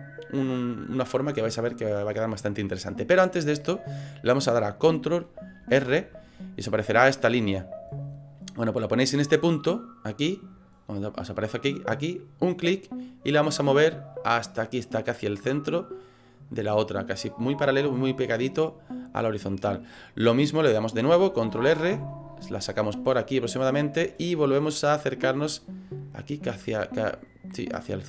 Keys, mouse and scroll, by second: 2.6 middle click, 5.6 ctrl+r, 19.3 middle click, 21.5 ctrl+r.